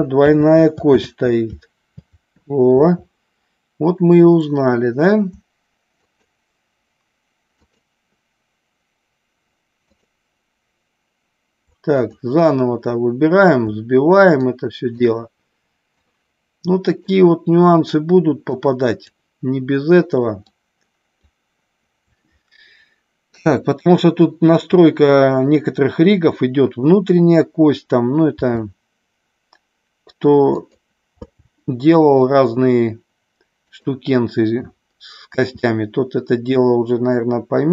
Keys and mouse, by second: 0.2 ctrl+z, 0.9 ctrl+z, 5.9 shift+click, 7.5-8.5 shift+drag, 9.7-10.8 shift+drag, 12.0 click, 14.3-15.1 shift+drag, 16.0-17.2 shift+drag, 18.6-19.1 shift+drag, 20.5-21.2 shift+drag, 28.3 r, 30.6 click, 31.2 g, 33.7 click, 35.3 s.